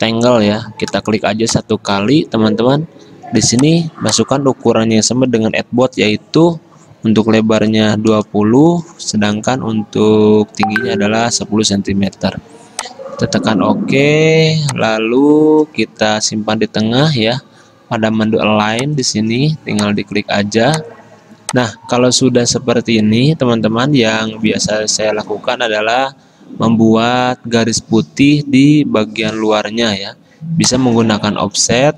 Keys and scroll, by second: 7.7-8.7 typing, 11.0-11.9 typing.